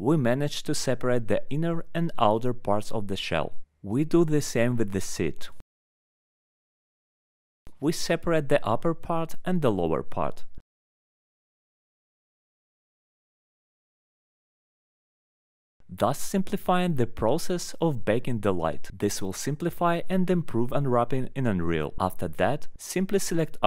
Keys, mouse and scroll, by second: 0.2 alt+middle click, 0.8 click, 2.4 alt+middle click, 2.5 middle click, 3.0 alt+middle click, 5.1 click, 7.1 click, 7.8 click, 8.7 middle click, 9.3 click, 9.8-10.2 scroll down 1, 11.8 click, 13.3 click, 15.0 click, 16.2 click, 17.3 click, 18.0 alt+middle click, 19.7 right click, 19.8 click, 20.3 alt+middle click, 21.5 right click, 21.5-22.6 alt+scroll, 21.7 alt+click.